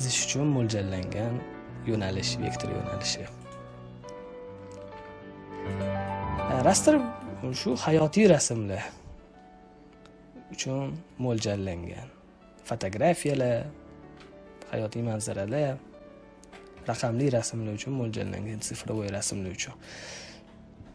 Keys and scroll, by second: 4.8 z.